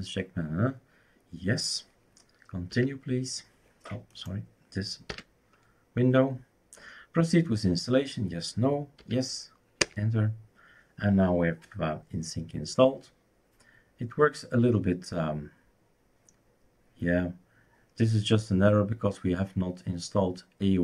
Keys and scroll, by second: 5.1 typing, 9.0 y, 9.8 Return.